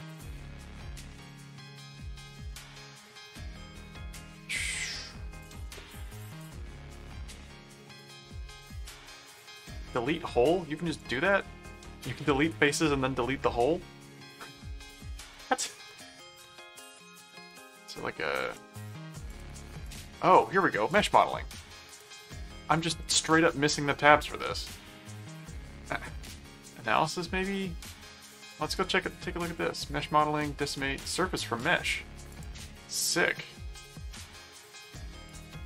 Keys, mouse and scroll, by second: 11.3 click, 12.6 click, 15.3 ctrl+click, 15.7 ctrl+w, 16.3 ctrl+w, 17.5 right click, 18.4 click, 19.3 click, 20.9 click, 21.9 right click, 22.9 click, 28.4 click, 32.3 click, 33.4 middle click, 35.3 click.